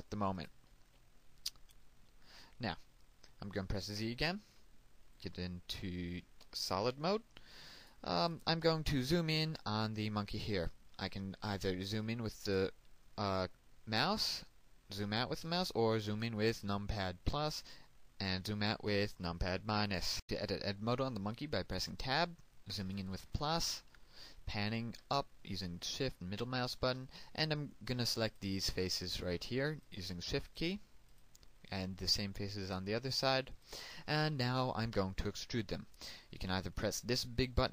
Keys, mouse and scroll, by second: 2.0 ctrl+click, 5.6 z, 6.8 shift+middle click, 9.5 click, 9.9 right click, 13.7 scroll up 1, 15.6 scroll down 1, 16.8-17.6 scroll up 1, 20.1 click, 23.6 Tab, 27.4 shift+middle click, 30.2 right click, 31.7 shift+right click, 32.4 shift+right click, 33.0 shift+right click, 34.0 shift+right click, 34.6 shift+right click, 35.1 shift+right click, 35.6 shift+right click.